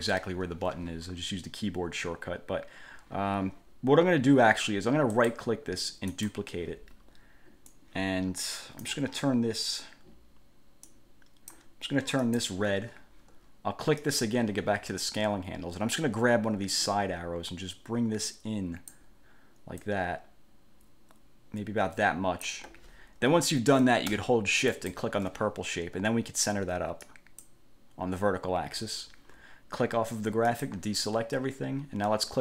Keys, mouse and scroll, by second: 5.4 click, 6.3 click, 7.9-9.2 drag, 11.0 click, 12.4 click, 14.2 click, 16.9-19.3 drag, 20.0-22.8 drag, 24.9 shift+click, 27.2 click, 30.6 click.